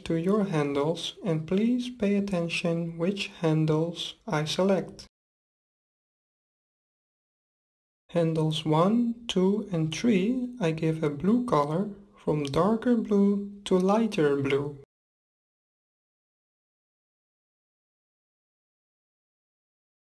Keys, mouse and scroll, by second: 8.7-10.5 drag, 11.7-13.5 drag, 18.0-19.7 drag.